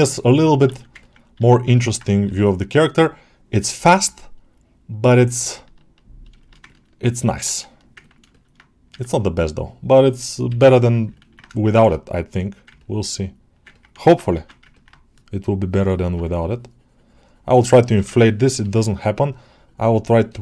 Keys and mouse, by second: 0.8 ctrl+alt+middle click, 1.6 ctrl+alt+middle click, 2.9-5.1 drag, 5.2 alt+shift+middle click, 5.4 alt+middle click, 6.3 shift+middle click, 6.5 ctrl+alt+middle click, 7.9 ctrl+alt+middle click, 8.2 alt+shift+middle click, 9.4 click, 10.9 l, 11.0 ctrl+alt+middle click, 11.7 shift+d, 12.6 ctrl+alt+middle click, 13.0 alt+middle click, 13.6 ctrl+alt+middle click, 13.8 shift+middle click, 14.3 ctrl+Tab, 14.7 alt+middle click.